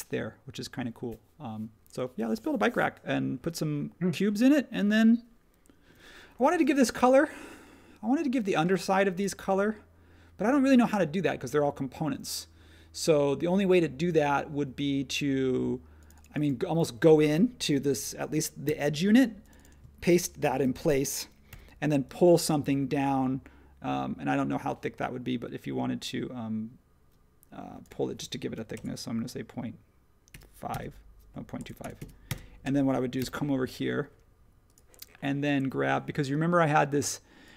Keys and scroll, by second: 6.5 space, 18.6 super+c, 20.6 shift+v, 21.5 p, 30.7-31.6 typing, 32.9-33.7 typing.